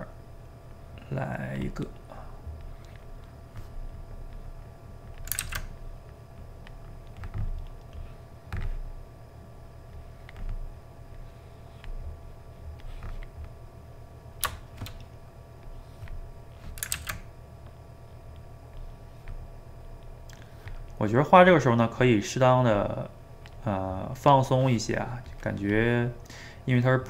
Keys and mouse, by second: 0.7-1.8 drag, 1.8 middle click, 2.6 click, 3.3-4.3 middle drag, 4.3-5.4 drag, 5.4 ctrl+z, 5.8-7.0 drag, 7.0-8.0 middle drag, 8.0 click, 9.0 middle click, 9.9-13.6 drag, 13.6-15.6 middle drag, 15.6-17.0 drag, 17.0 ctrl+z, 17.8 middle click, 18.7 click, 19.6 middle click, 20.4 click, 21.1-22.7 middle drag, 22.7-23.9 drag, 23.9-25.3 middle drag, 25.3-26.6 drag, 26.6 middle click.